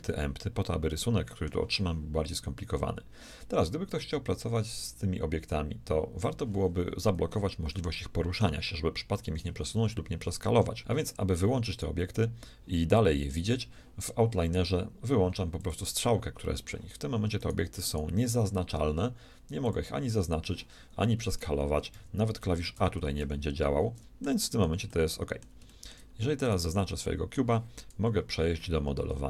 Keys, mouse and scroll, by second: 0.9 middle click, 4.8-6.7 drag, 7.7 g, 10.2 s, 11.7-13.7 right drag, 15.6-17.5 drag, 17.5-19.9 right drag, 19.6-21.6 drag, 21.9-24.0 typing, 24.0 click, 26.4-28.3 shift+right drag, 27.3-28.3 drag, 27.9 KP_1, 29.0 z.